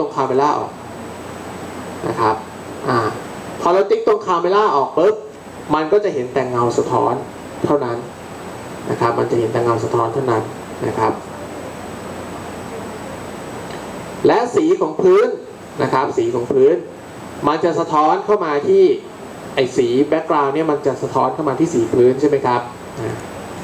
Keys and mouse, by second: 23.1-23.6 drag.